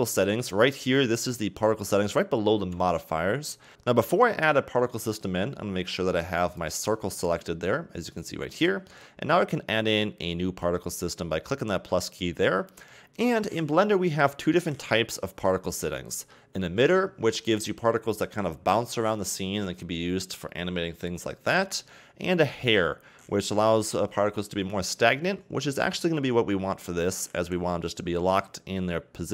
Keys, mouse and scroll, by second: 3.7-6.3 scroll up 1, 6.4 click, 10.6 click.